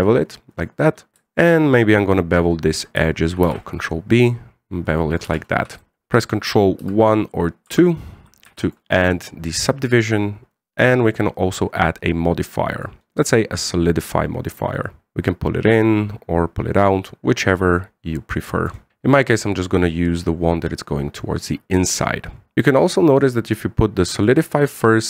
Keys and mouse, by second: 1.7 right click, 2.0 alt+shift+right click, 4.2 ctrl+b, 5.9 Tab, 7.7 ctrl+1, 8.4 ctrl+2, 9.2 w, 9.7-10.7 middle drag, 11.6-13.6 drag, 15.1-18.9 drag, 19.2-22.2 middle drag, 23.0-25.0 drag.